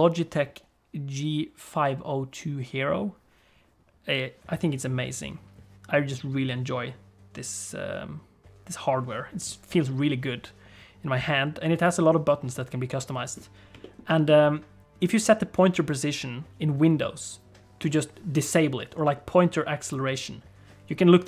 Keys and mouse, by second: 13.9 shift+middle click, 14.0 middle click.